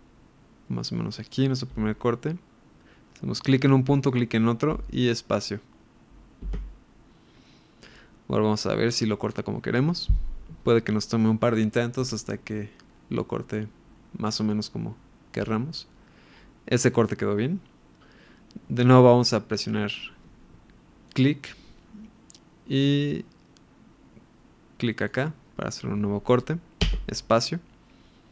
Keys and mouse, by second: 21.0 click, 25.0 click.